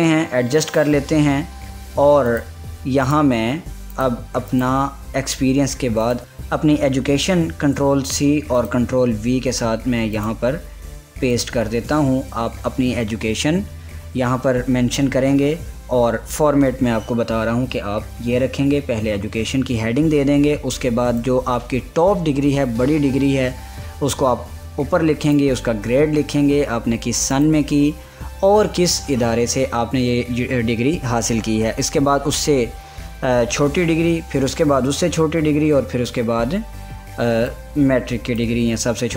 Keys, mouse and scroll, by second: 3.0 click, 3.7 click, 5.4 click, 6.0 scroll down 1, 6.3 ctrl+a, 8.1 ctrl+c, 9.2 click, 11.1 click, 12.3 ctrl+a, 12.9 ctrl+v, 21.8-28.0 drag, 38.1-39.1 drag.